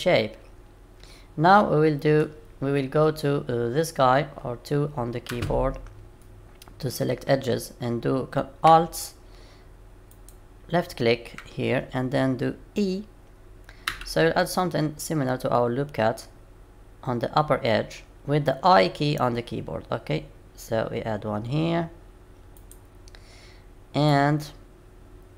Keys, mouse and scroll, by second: 5.3 2.